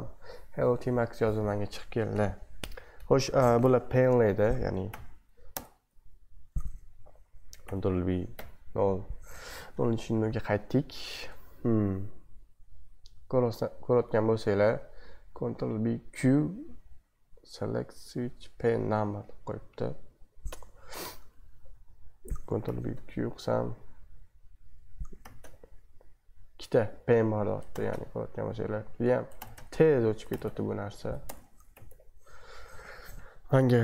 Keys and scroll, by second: 2.2 typing, 4.9 ctrl+b, 5.5 Left, 7.6 ctrl+b, 8.3 0, 9.8 super+2, 21.5 super+1, 22.6 ctrl+b, 22.9 q, 25.2 ctrl+b, 25.4 q, 27.7 ctrl+b, 27.9 q, 29.4 ctrl+b, 30.3 ctrl+b, 30.4 q, 31.4 BackSpace, 31.7 ctrl+b, 31.9 q, 32.7 super+2.